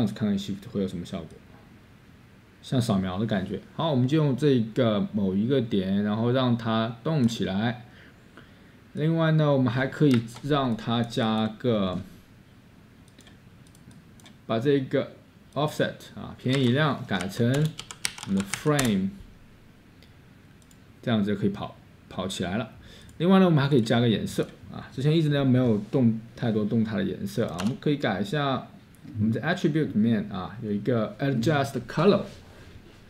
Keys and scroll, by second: 2.3-3.0 typing, 10.1 Escape, 16.6-19.4 typing, 27.6 Tab.